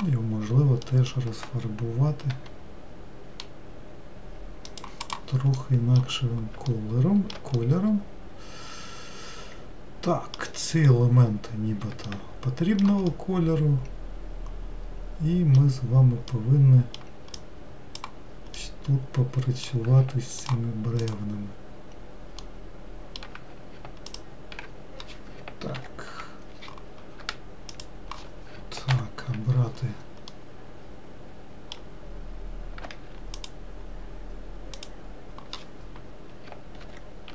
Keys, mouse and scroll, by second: 2.9 g, 5.7 click, 6.2 middle click, 6.6-7.3 scroll down 2, 7.3-11.4 shift+middle drag, 11.4-12.5 scroll up 2, 12.5 scroll up 1, 12.7-18.5 shift+middle drag, 18.5 click, 19.1-21.0 middle drag, 21.0 ctrl+click, 21.6 ctrl+click, 23.0-24.7 ctrl+middle drag, 24.7 ctrl+click, 26.3 ctrl+l, 28.3 shift+click, 29.4 ctrl+l, 30.9-34.0 middle drag, 34.0 shift+click.